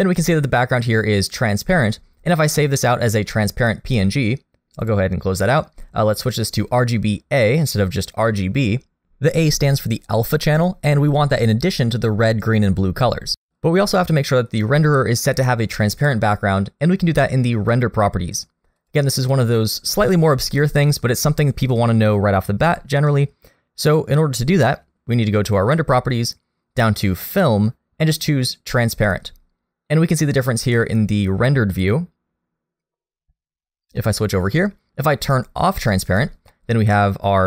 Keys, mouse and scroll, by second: 7.3 click, 18.8 click, 22.7 click, 27.3 click, 32.7 click, 34.0 middle click, 35.7 click, 36.5 middle click.